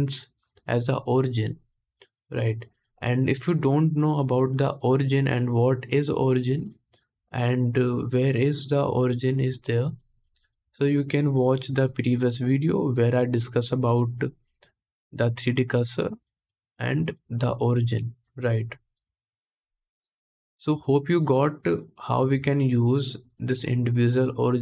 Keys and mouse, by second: 16.5-20.1 middle drag, 20.1-24.6 drag.